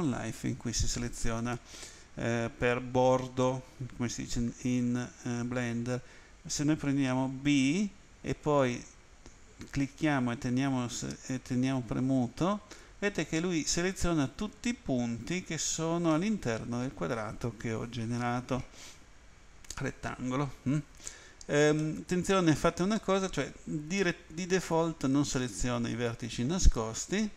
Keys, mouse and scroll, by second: 7.6 b, 8.6 click, 21.8 middle click.